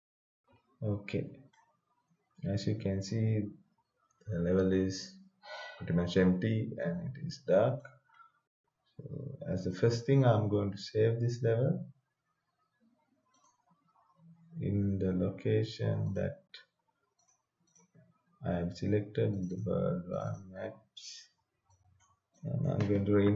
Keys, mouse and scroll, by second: 1.5-9.6 right drag, 9.6 click, 13.4 click, 16.0 click.